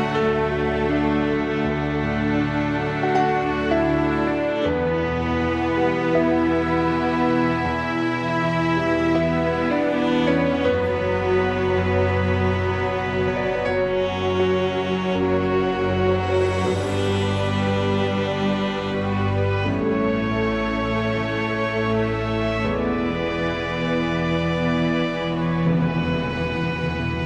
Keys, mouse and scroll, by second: 1.4 click, 2.0 s, 2.7 g, 3.5 click, 3.7 g, 6.3 click, 6.6 g, 8.1 click, 8.2 g, 9.2 click, 10.8 g, 12.4-13.5 middle drag, 13.5 alt+click, 14.6 g, 15.6 click, 16.9 g, 18.3-18.9 middle drag, 19.0 middle click, 19.2 middle click, 23.0 click, 24.3 e, 25.1 s, 25.8 g, 27.0 r.